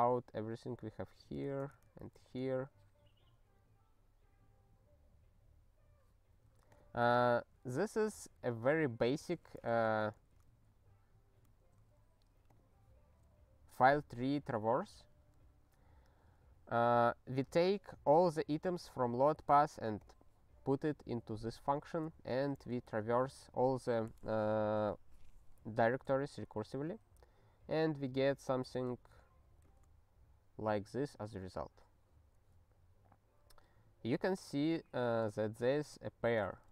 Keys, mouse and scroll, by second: 0.9 ctrl+p, 1.1 ctrl+a, 1.3 ctrl+space, 1.4 ctrl+e, 1.6 alt+;, 2.1 ctrl+s, 3.5-4.8 scroll down 3, 4.8-5.8 scroll down 2, 5.8-6.7 scroll, 6.7 click, 7.4 ctrl+n, 8.0 ctrl+b, 8.1 ctrl+b, 8.8 ctrl+b, 9.2 ctrl+b, 9.6 ctrl+alt+f, 11.7 ctrl+g, 12.4 click, 17.5 click, 20.0 click, 21.4 ctrl+n, 21.9 ctrl+a, 22.5 ctrl+alt+f, 26.7 ctrl+n, 26.9 ctrl+e, 29.7 ctrl+e.